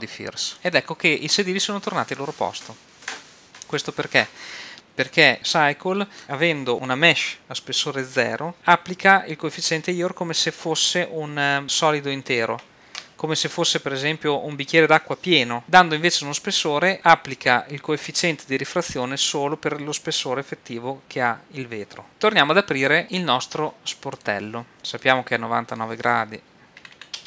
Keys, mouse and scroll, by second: 24.2 right click, 24.7-27.2 drag, 26.9 KP_9.